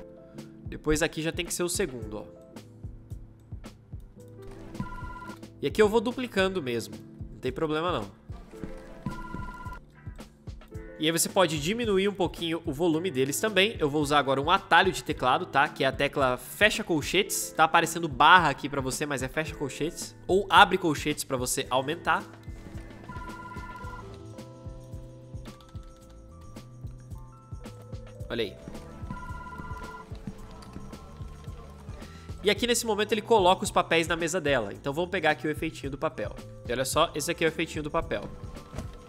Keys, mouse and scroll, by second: 1.7-4.1 ctrl+middle drag, 1.7-2.5 ctrl+scroll, 4.1 space, 5.4-8.0 alt+drag, 8.0 space, 15.0 \, 19.0 \, 20.2 ], 22.3 space, 25.3 ], 31.8 space, 36.4 \, 37.9 space.